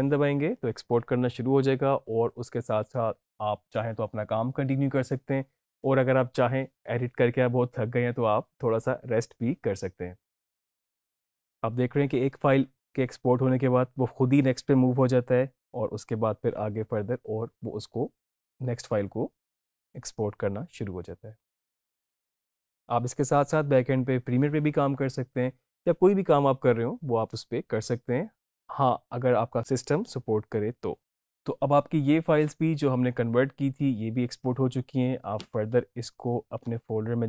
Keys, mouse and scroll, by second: 36.5 alt+Num_Lock, 36.6 alt+Tab.